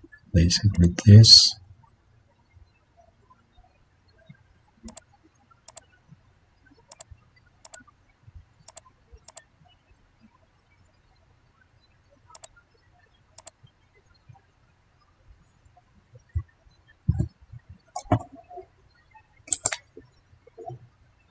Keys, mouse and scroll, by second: 4.4 ctrl+d, 11.1 ctrl+d, 17.1 ctrl+d, 18.0 ctrl+0.